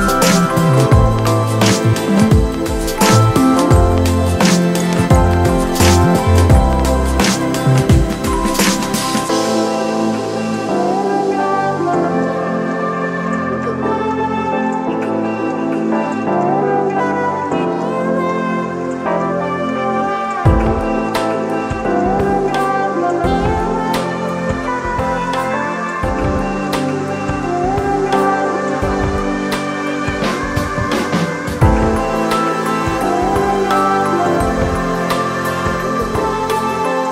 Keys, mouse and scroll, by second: 8.4 [, 12.5 ], 30.3 ctrl+0, 34.4 [.